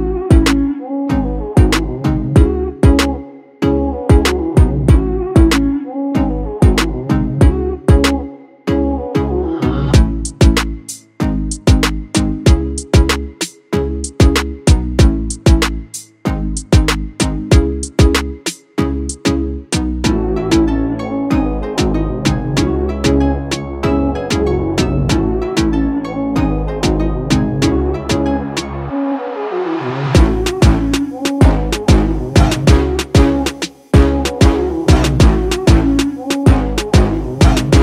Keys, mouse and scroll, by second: 1.1 click, 2.8-8.0 alt+drag, 8.0-14.3 alt+drag, 19.8 ctrl+t, 20.9-22.6 drag, 33.6-37.8 drag.